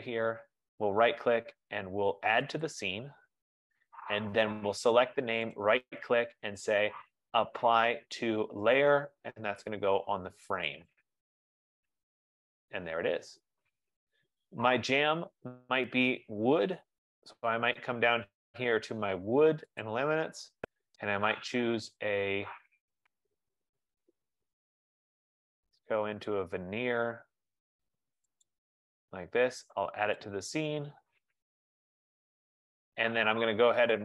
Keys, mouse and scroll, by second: 0.4 right click, 2.8 click, 5.9 right click, 11.3 click, 18.0 F15, 19.9 click, 21.5-23.3 scroll, 23.6-24.2 scroll, 24.6-25.1 scroll, 28.5 right click, 30.4 right click, 30.6 click.